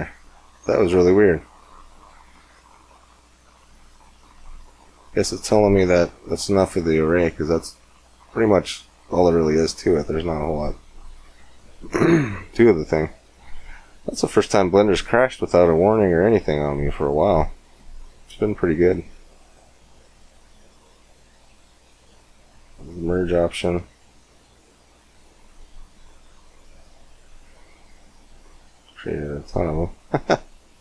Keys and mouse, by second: 1.3 middle click, 1.9 shift+a, 7.0-9.6 drag, 9.6 middle click, 9.7-12.1 drag, 12.1-19.2 middle drag, 19.2-27.1 drag, 27.1-30.8 middle drag.